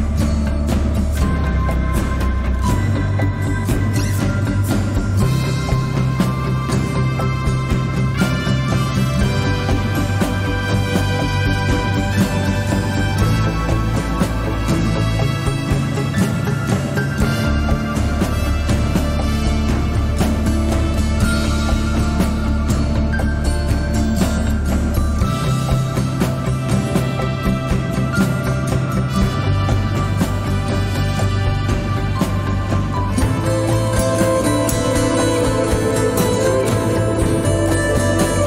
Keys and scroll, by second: 1.2 z, 8.2 Tab, 12.2 shift+a, 21.3 s, 25.4 g, 26.0 z, 31.0 g, 34.9 g, 36.2 z.